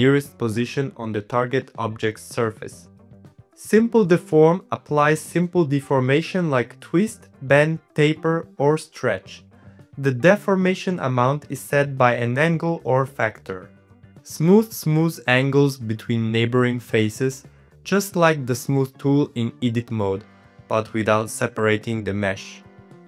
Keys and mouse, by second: 0.2 middle click, 0.5 z, 1.1 shift+click, 2.1 middle click, 2.5 alt+z, 2.7 middle click, 3.3 middle click, 4.0-5.7 drag, 6.2-7.4 drag, 7.6 click, 7.8-9.0 drag, 9.4-10.4 drag, 10.8-12.2 drag, 12.3 click, 12.5 click, 13.6 click, 14.2 shift+middle click, 17.9 shift+click, 18.1 middle click, 18.7-20.0 shift+drag, 20.2 middle click, 21.0 click, 21.5 Tab, 21.7 middle click, 21.9 click, 22.0-23.0 middle drag.